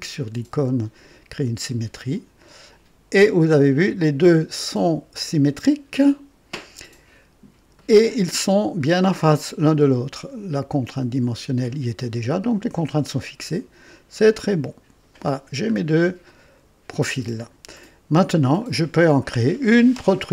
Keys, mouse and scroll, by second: 1.8 s, 7.8-8.5 right drag, 14.3 click, 15.7-16.0 scroll up 2, 16.3-16.8 right drag, 17.2 scroll up 1, 17.7-18.4 right drag, 18.6 scroll up 1, 19.2-19.8 right drag.